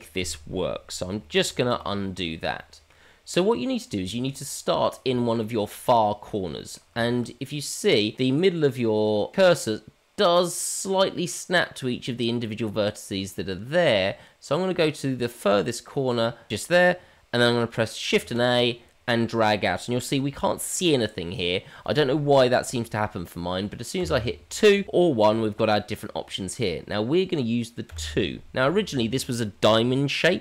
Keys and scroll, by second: 1.7 ctrl+z, 18.2 shift+a.